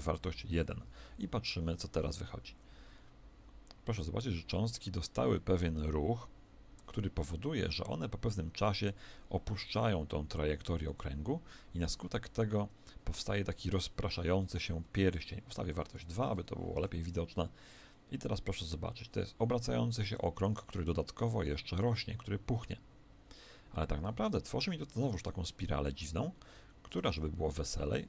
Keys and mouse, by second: 1.9 alt+a, 14.7 Escape, 15.7 click, 16.6 alt+a, 24.4-26.9 middle drag, 26.9 alt+a, 27.5-28.0 middle drag.